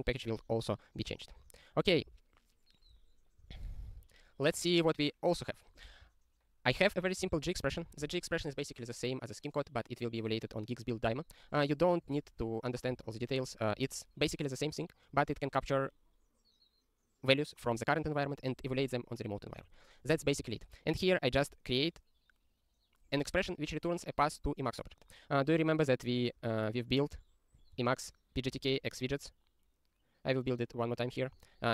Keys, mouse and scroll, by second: 1.1 scroll down 3, 1.9 click, 6.8 ctrl+p, 6.9 ctrl+p, 7.0 ctrl+p, 7.2 ctrl+a, 7.3 ctrl+space, 7.4 ctrl+e, 7.8 ctrl+g, 12.0 click, 13.1 ctrl+alt+@, 13.7 ctrl+g, 15.1 click, 20.1 ctrl+n, 20.2 ctrl+n, 20.3 ctrl+n, 20.4 ctrl+n, 20.4 ctrl+n, 21.3 click, 27.6 click, 28.6 ctrl+e.